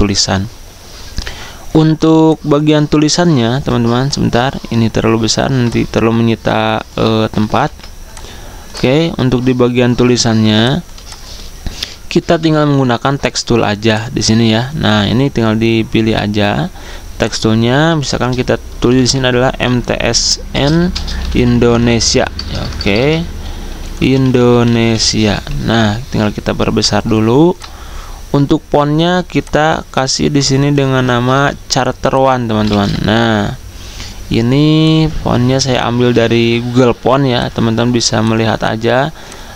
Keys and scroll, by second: 3.4 ctrl+2, 7.4 ctrl+g, 10.4 z, 12.3 v, 17.8 Caps_Lock, 18.6-31.2 typing, 25.7 Escape, 32.3-33.3 typing, 36.0 d.